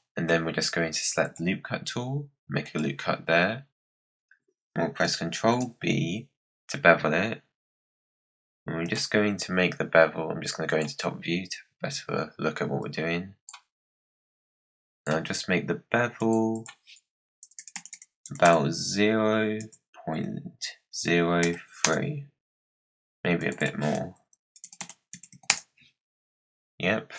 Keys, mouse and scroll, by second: 1.1-5.3 drag, 5.3 ctrl+b, 10.6 click, 11.4 scroll up 3, 12.7-13.7 drag, 13.7-14.4 scroll up 1, 14.4-17.5 drag, 17.5 BackSpace, 17.6 BackSpace, 18.1 BackSpace, 23.3-24.7 drag, 24.7 BackSpace.